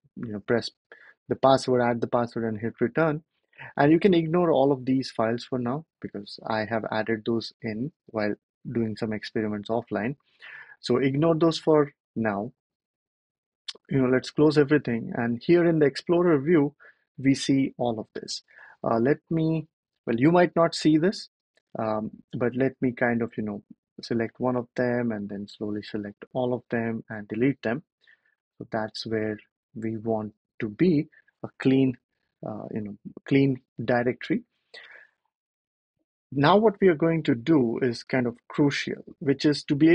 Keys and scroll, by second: 24.7 shift+Up, 25.1 shift+Up, 25.2 shift+Up.